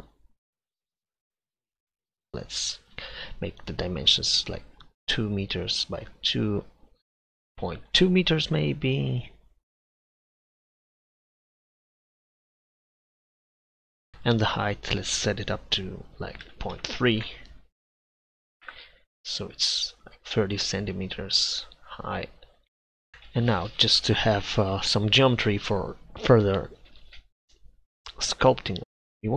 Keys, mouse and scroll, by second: 0.3 click, 1.1 click, 1.5 KP_7, 6.8-10.1 drag, 10.4 middle click, 10.6 click, 10.7 middle click, 10.9 click, 11.2 middle click, 11.5 KP_7, 12.7 middle click, 13.4 middle click, 13.8 KP_7, 14.8-18.6 drag, 21.3-23.1 drag, 23.1 KP_1, 28.8 Tab.